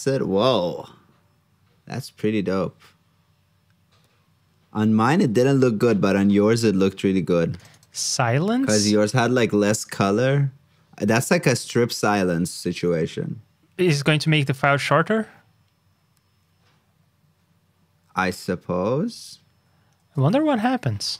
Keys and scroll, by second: 5.1 super+Tab, 20.2 super+c, 20.5 super+Tab.